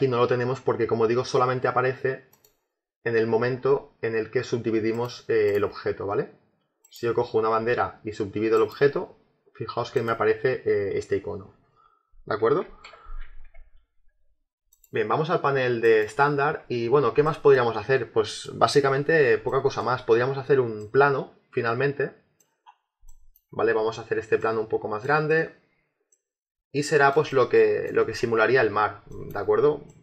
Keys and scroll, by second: 12.5 ctrl+z.